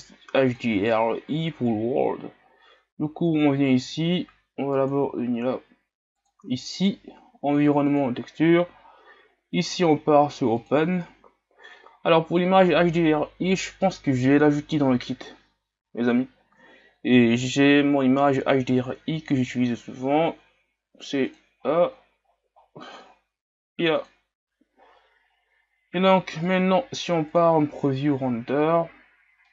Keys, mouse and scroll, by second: 4.0-21.3 drag, 24.1-29.4 drag, 29.4-29.5 middle drag.